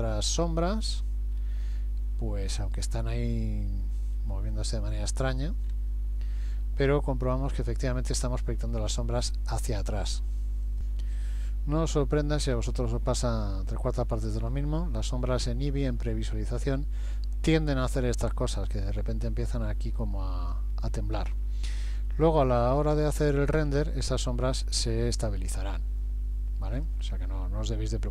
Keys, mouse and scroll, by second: 0.3 middle click, 1.4-2.0 scroll up 1, 2.6 middle click, 2.6 scroll up 2, 4.2 middle click, 5.7 scroll up 3, 10.8 click, 11.4 middle click, 13.1 scroll down 1, 14.1 middle click, 14.1 scroll down 1, 16.7 middle click, 19.1-19.7 scroll down 5, 20.1 middle click, 21.9 middle click, 22.9-23.3 scroll up 3, 23.5-23.9 scroll up 1, 24.9 scroll up 1, 26.8 click.